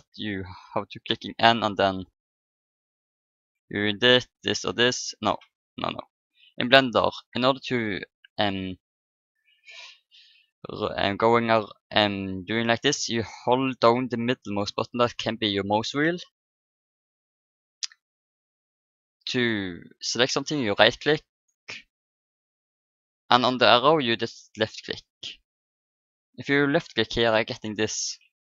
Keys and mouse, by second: 0.1 n, 1.4-6.4 drag, 4.1-5.9 right drag, 4.6 middle click, 12.1-13.9 middle drag, 17.3-19.2 middle drag, 21.4-24.8 right drag, 24.1-25.7 drag, 26.7-28.4 drag.